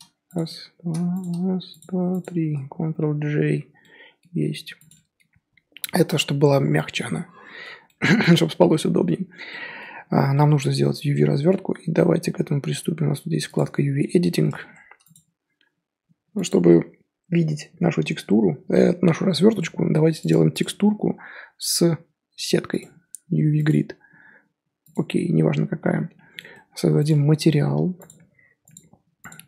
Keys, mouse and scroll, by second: 3.2 ctrl+j, 3.8-4.4 middle drag, 4.4 scroll down 4, 4.7 click, 4.9-5.3 middle drag, 5.3 scroll up 2, 6.5-10.0 middle drag, 10.0 scroll down 2, 10.3-13.5 middle drag, 13.5 click, 14.2-14.6 middle drag, 14.6 Tab, 26.0 scroll down 1, 26.1 scroll up 1, 26.3-27.0 middle drag, 27.0 click.